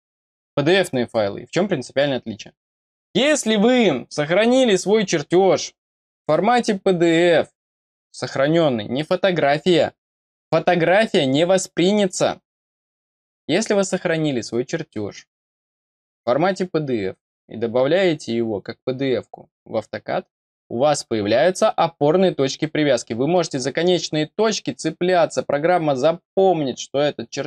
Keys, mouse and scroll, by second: 24.4-25.0 scroll up 2.